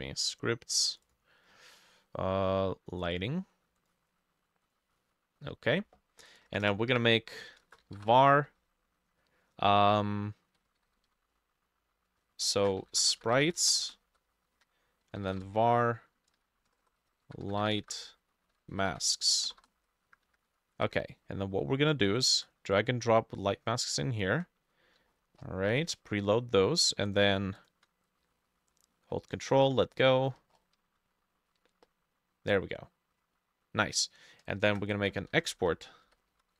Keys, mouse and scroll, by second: 1.1 double click, 3.2 double click, 6.5 Return, 6.7 Return, 7.0 Up, 7.6-8.4 typing, 10.4-19.8 typing, 10.6-17.6 drag, 12.2 ctrl+middle click, 20.3 Up, 20.5 Escape, 22.2 shift+click, 25.2-26.7 shift+scroll up 22, 27.6 shift+click, 30.3-31.2 shift+scroll up 16, 34.7 Return, 35.4-36.5 typing.